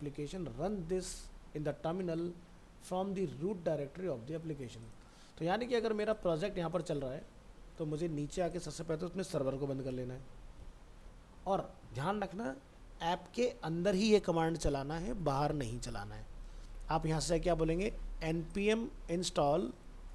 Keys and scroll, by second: 9.5 ctrl+c, 16.7 alt+Tab, 19.6 ctrl+c.